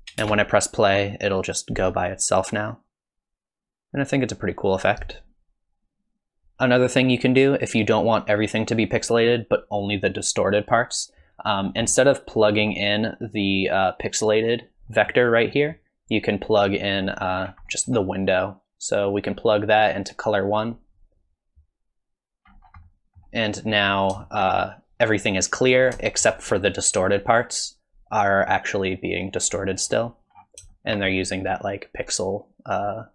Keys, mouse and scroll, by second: 0.2 space, 6.4 click, 6.4 middle click, 6.6-7.1 scroll up 1, 11.6-12.3 scroll down 4, 11.9 middle click, 15.5 middle click, 16.3 click, 17.4-18.3 scroll down 3, 17.6-18.3 scroll up 1, 18.3 middle click, 18.7 click, 22.5-23.3 scroll up 4, 22.8 middle click, 23.6-24.2 scroll up 3, 24.2 shift+middle click, 25.7 scroll down 5, 26.0 shift+middle click, 26.5 scroll up 2, 30.3-30.7 scroll down 3, 30.7 shift+middle click.